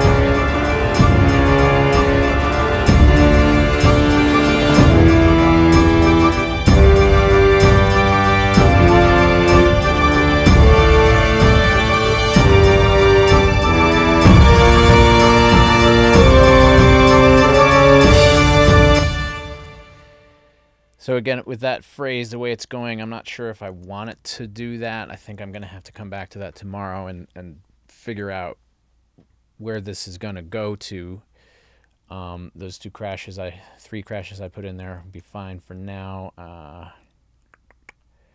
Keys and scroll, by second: 18.9 space, 23.7 super+a.